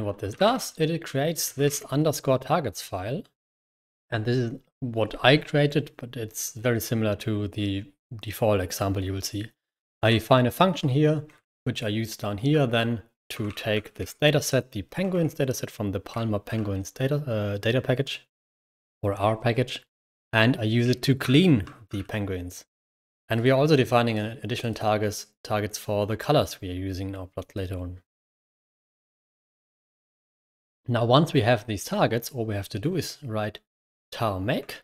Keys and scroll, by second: 0.0-2.0 typing, 9.6-16.4 typing, 21.8 l, 21.9 l, 22.4-23.0 l, 28.1 0, 29.0 ctrl+o, 29.6 ctrl+o, 29.9-30.7 typing, 34.7 ctrl+Return.